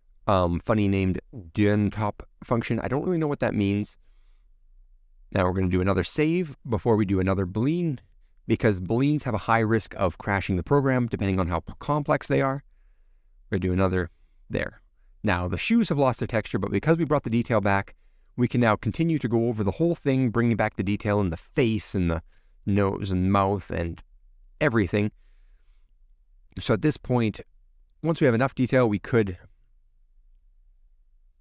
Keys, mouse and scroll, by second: 0.0 middle click, 0.3-0.8 scroll up 16, 0.8-2.4 scroll down 4, 2.4 click, 2.8-4.5 middle drag, 4.5 click, 10.4 middle click, 10.9 click, 11.3 click, 11.8 shift+click, 14.8-15.9 middle drag, 15.9 click, 16.2-19.5 middle drag, 19.5-20.2 scroll up 5, 20.2-22.3 middle drag, 22.7 click, 23.5-23.9 scroll down 3, 24.1 shift+middle click, 24.8-28.7 middle drag, 28.7 click.